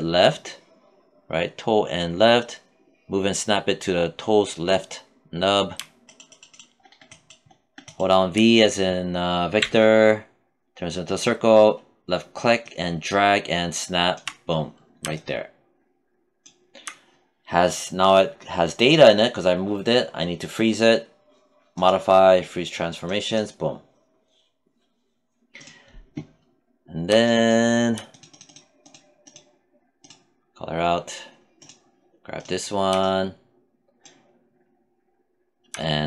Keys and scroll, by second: 9.0 v.